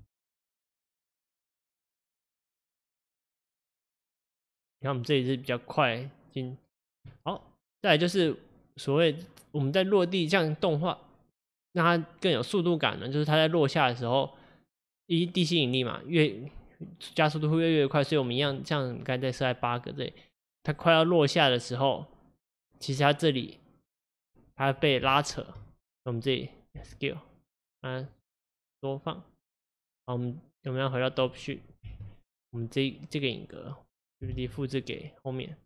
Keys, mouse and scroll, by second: 1.6 space, 2.1-5.3 drag, 9.3-12.4 drag, 19.4-22.4 drag, 25.2-26.9 shift+middle drag, 26.9 s, 31.7-34.4 drag, 34.4 shift+d.